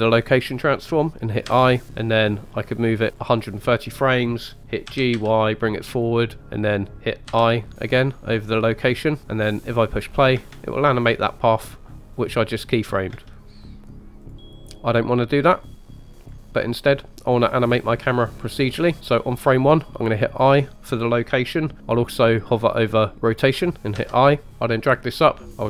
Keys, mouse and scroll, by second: 1.5 i, 3.1 click, 4.9 g, 5.1 y, 5.9 click, 7.3 i, 9.2 click, 9.2 space, 10.4 space, 13.1 space, 14.2-16.1 drag, 24.0 i, 24.5 click.